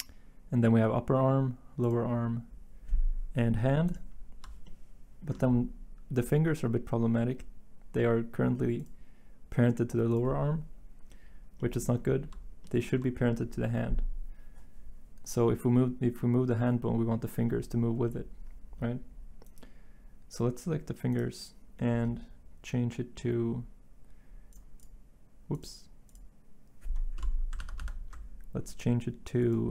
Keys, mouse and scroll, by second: 27.6 ctrl+z, 27.8 ctrl+z.